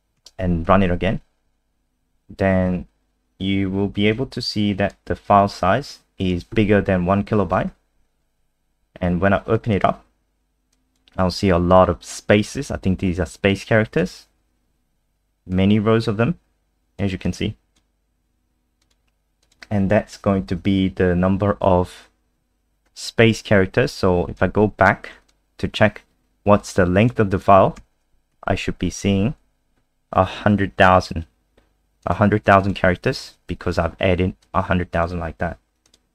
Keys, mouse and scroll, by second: 0.2 ctrl+s, 0.6 F5, 4.1 click, 9.7 click, 10.7 click, 14.4-15.5 scroll down 3, 15.5 click, 24.4 ctrl+z, 25.2 click, 27.8 ctrl+s, 28.3 F5, 32.0 click, 33.2 ctrl+y, 34.4 click.